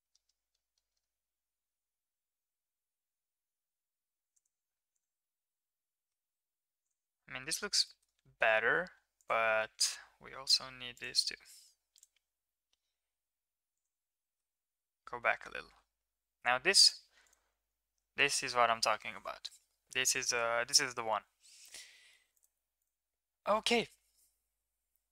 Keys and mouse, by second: 4.6 Tab, 4.9 right click, 5.2-6.1 middle drag, 6.3 middle drag, 7.2 middle drag, 7.8 shift+middle click, 8.2 Tab, 9.5 middle drag, 10.2 g, 11.9 drag, 12.3 g, 14.1-14.5 middle drag, 15.6 Tab, 16.8 click, 20.0-22.1 middle drag, 22.3 click, 22.8 click.